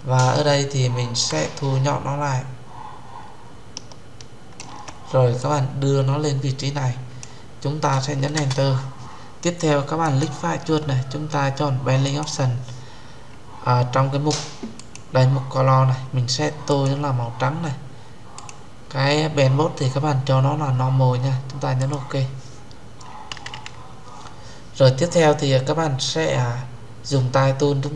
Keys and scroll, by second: 8.2 Return.